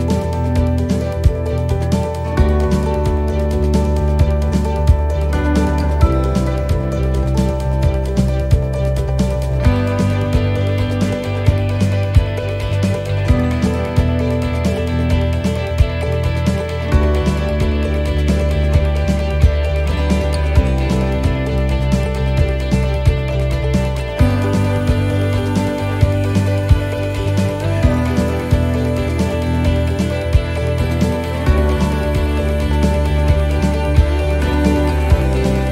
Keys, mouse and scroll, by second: 4.2 middle click, 4.7 shift+middle click, 5.0-5.6 scroll up 3, 5.4 middle click, 6.3 click, 8.2 shift+middle click, 8.9 middle click, 10.8 click, 22.9 click, 27.7 ctrl+shift+t.